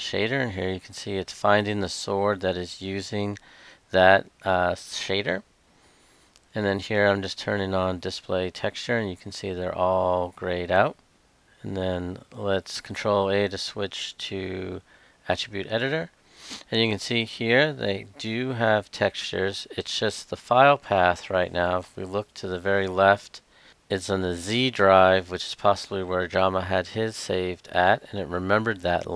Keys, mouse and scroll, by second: 11.5 ctrl+a, 13.2-14.5 drag, 20.6-21.3 Left, 23.7 Left.